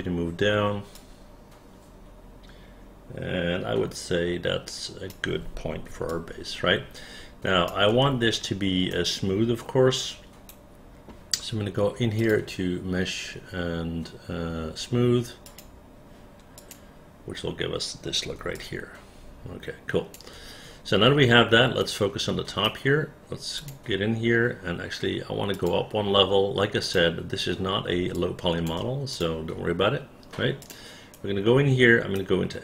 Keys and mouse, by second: 1.1-5.2 drag, 6.2-7.8 alt+drag, 9.0-10.6 right drag, 16.7 click, 18.7-20.3 alt+drag, 21.9 right click, 23.7 click, 28.3 alt+click, 29.3 click, 30.7 click, 31.3-32.3 right drag.